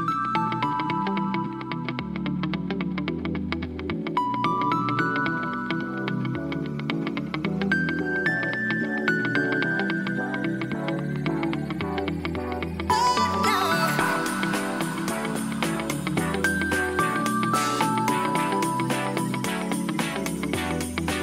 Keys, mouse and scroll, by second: 1.7 click, 2.1 click, 2.3 g, 2.5 g, 3.1 click, 3.4 click, 3.6 g, 3.8 g, 4.2 click, 4.7 middle click, 6.2 g, 6.3 g, 7.1 click, 7.6-9.6 typing, 8.0 drag, 8.3 click, 8.8 click, 10.1 click, 10.6-13.1 middle drag, 14.0 click, 15.1 g, 15.4 z, 18.8 click, 19.7 g, 20.1 z, 20.8 click.